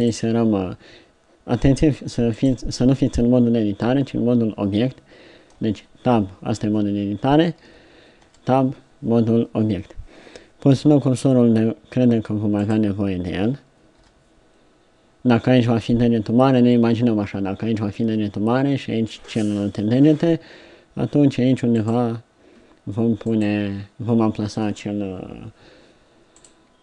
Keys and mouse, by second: 5.6 Tab, 7.7 a, 8.2 Tab, 10.7 KP_3, 14.0 KP_7.